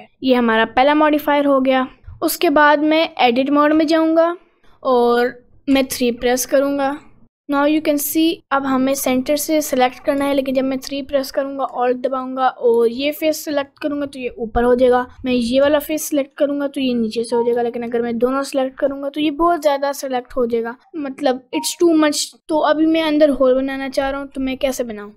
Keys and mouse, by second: 0.7 middle click, 1.2 middle click, 3.1 right click, 3.8 Tab, 4.2-5.4 middle drag, 5.7 3, 6.9 click, 10.3 3, 17.9 shift+a, 18.5 click.